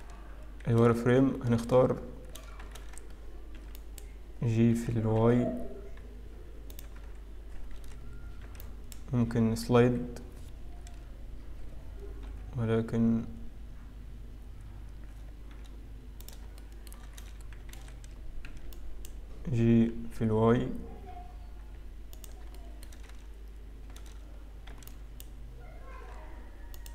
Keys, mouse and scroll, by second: 0.8 a, 1.6 a, 3.3 a, 3.7 b, 4.8 g, 7.7 alt+a, 8.5 b, 9.7 g, 12.6 g, 16.8 shift+middle click, 17.7 alt+a, 18.9 a, 18.9 b, 21.5 g, 23.1 shift+middle click, 23.7 a, 24.7 b, 25.9 g.